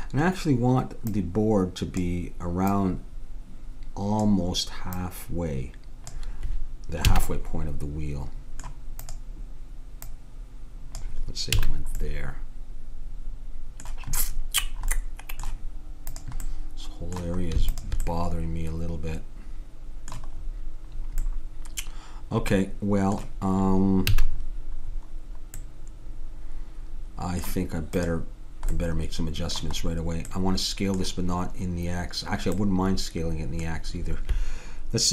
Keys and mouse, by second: 5.0-6.8 drag, 7.2 a, 7.3-8.5 middle drag, 9.0-11.8 drag, 11.6 a, 12.3-13.4 middle drag, 16.1-19.6 drag, 18.1-19.8 middle drag, 21.4 middle click, 24.1 a, 28.0-29.9 drag, 28.7-30.6 middle drag.